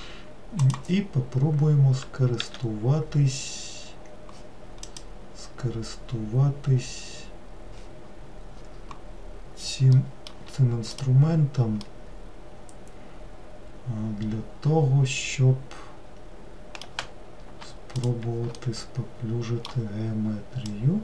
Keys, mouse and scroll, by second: 0.7-2.4 drag, 2.4 w, 4.9-7.9 drag, 10.1-11.0 middle drag, 11.0 click, 11.9-15.0 middle drag, 18.0 shift+click, 18.7-20.7 middle drag, 20.7 click.